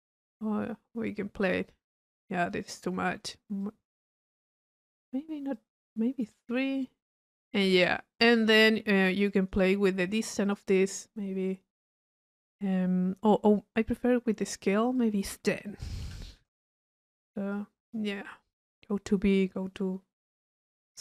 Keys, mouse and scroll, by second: 0.2-2.8 drag, 3.6-4.6 drag, 5.6-5.9 drag, 6.3 click, 7.6 middle click, 8.3 click, 9.3 click, 9.9 middle click, 10.5 click, 11.5 click, 15.0 drag, 17.5 click.